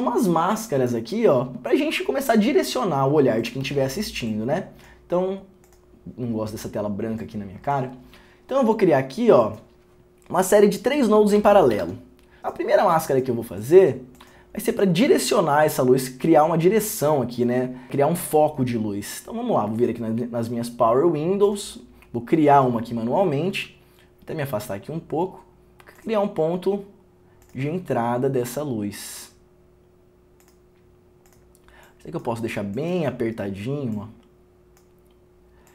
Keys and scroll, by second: 3.8 alt+s, 11.5 alt+p, 11.9 alt+p.